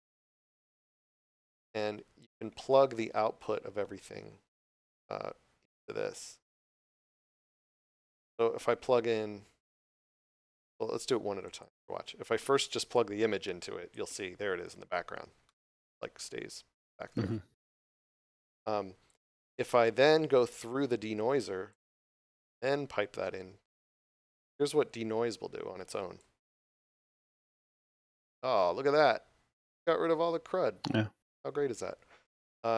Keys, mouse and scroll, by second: 1.5 click, 11.4 click, 15.4 middle click, 18.0 click.